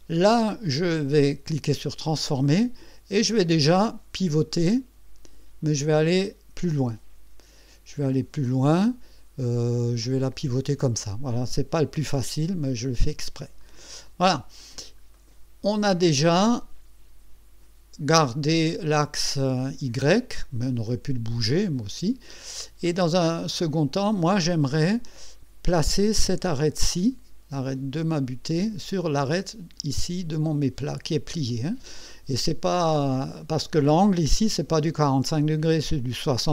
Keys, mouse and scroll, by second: 0.8 right click, 1.7 click, 3.5-11.0 drag, 13.6 click, 14.6-14.9 scroll up 1, 15.1-16.1 right drag, 16.4-18.6 drag, 18.8 click, 21.4-22.6 drag, 22.8 scroll up 1, 23.5 right click, 24.1 click, 24.7 click, 25.9 click, 32.1-33.2 drag, 33.3-33.6 scroll down 1, 34.3 KP_1.